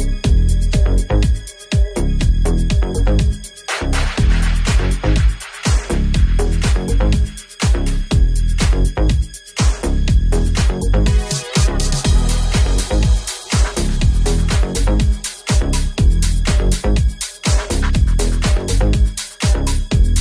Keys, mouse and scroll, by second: 0.6 3, 0.9 right click, 1.4 right click, 1.8 right click, 2.1 right click, 2.6 shift+right click, 3.0 shift+right click, 5.6 g, 8.5 e, 12.8 i, 14.2 ctrl+KP_Add, 15.1 g, 18.5 s.